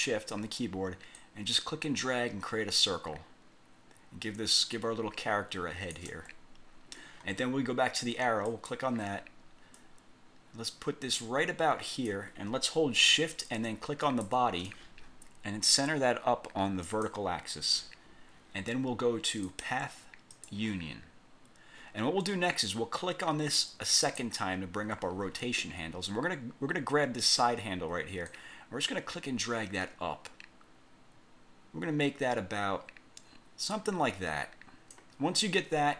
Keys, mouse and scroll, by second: 1.3-6.2 ctrl+shift+drag, 8.6 click, 9.9-12.4 drag, 14.2 shift+click, 17.0 click, 19.6 click, 20.5 click, 24.2 click, 28.4-35.3 drag.